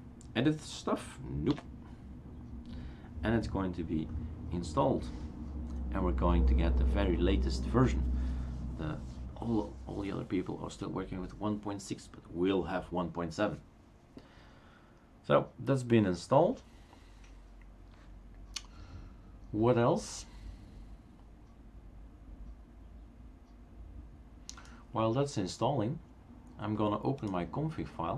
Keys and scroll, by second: 1.7 n.